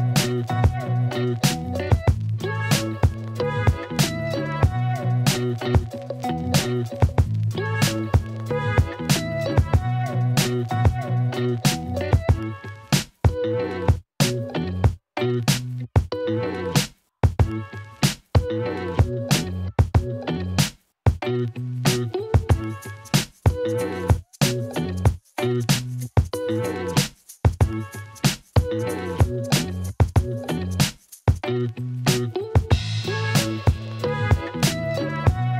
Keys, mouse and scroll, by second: 0.6-1.1 drag, 1.3-1.7 alt+drag, 1.7-2.3 alt+middle drag, 2.9 KP_1, 3.2 r, 3.4 x, 8.7 s, 10.0-11.1 alt+middle drag, 11.2-13.5 typing, 15.1 s, 16.0 shift+d, 16.1 x, 17.7 g, 17.8 x, 18.8 middle drag, 19.3 KP_7, 20.4 g, 20.5 y, 21.7 middle drag, 22.1 alt+middle drag, 22.2 ctrl+alt+middle drag, 22.5 alt+shift+middle drag, 22.7-23.6 alt+middle drag, 23.7 ctrl+alt+middle click, 23.8 ctrl+alt+middle click, 23.9 alt+shift+middle drag, 24.1-25.2 alt+middle drag, 25.3 ctrl+alt+middle drag, 26.3 ctrl+s, 26.6 alt+middle click, 27.2 KP_1, 27.6 ctrl+alt+click, 27.8 alt+shift+drag, 28.6 shift+a, 30.3 Tab, 31.0 r, 31.1 z, 32.9 r, 33.1 z, 34.0 s, 34.2 z.